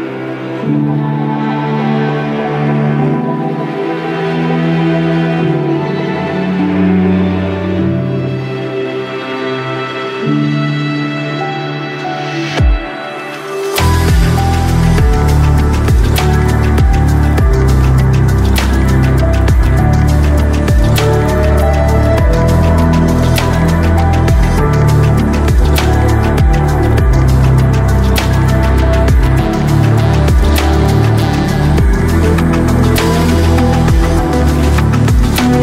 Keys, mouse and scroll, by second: 0.1 right click, 0.6-1.6 right drag, 2.0 right click, 2.7 middle click, 2.9 d, 3.5 middle click, 3.8 middle click, 4.0 shift+click, 4.7 shift+middle click, 5.5 middle click, 5.9 ctrl+middle click, 6.1 q, 6.7 click, 7.1 ctrl+shift+middle click, 7.6 click, 7.7 click, 8.7 click, 9.4 click, 9.8 click, 10.2 click, 10.6 click, 11.3 click, 12.3 click, 12.8 middle click, 13.0 s, 13.3 click, 14.5 middle click, 15.8-16.9 drag, 19.3-20.4 drag, 19.4 KP_0, 20.7 click, 25.4 middle click, 25.8-27.9 drag, 29.3-31.2 drag, 31.3 middle click, 32.1-34.0 drag, 34.2 middle click, 34.4 click.